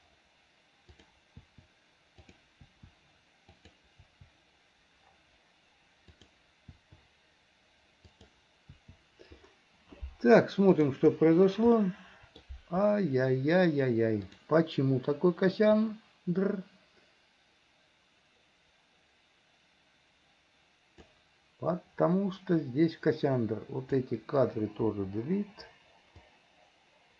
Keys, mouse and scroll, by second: 1.1 click, 1.5 i, 2.4 click, 2.7 i, 3.7 click, 4.1 i, 6.2 click, 6.8 i, 8.2 click, 8.8 i, 10.8 click, 11.8 middle click, 14.3 click, 15.9-21.2 drag, 22.7-23.9 drag, 24.9 Delete, 26.3-27.1 drag.